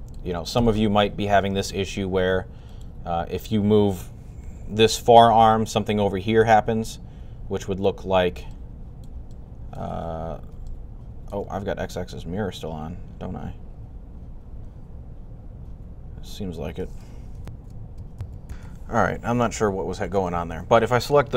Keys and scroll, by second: 4.3 r, 18.3-21.3 super+z.